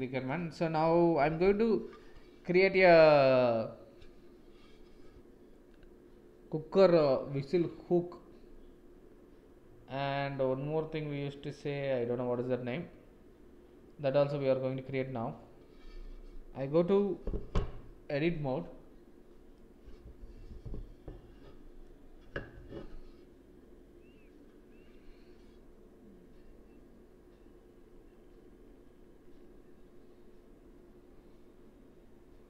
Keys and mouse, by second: 0.0 shift+middle click, 19.5-21.1 middle drag, 21.1 click.